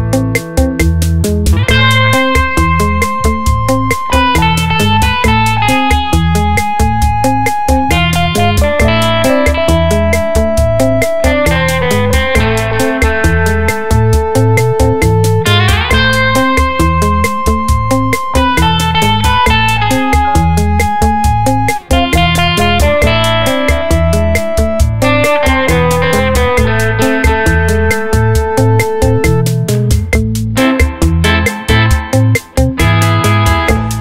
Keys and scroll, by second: 2.1 space, 3.7 ctrl+z, 15.0 e, 20.6 space, 27.9 alt+Tab, 28.8 space, 33.6 v.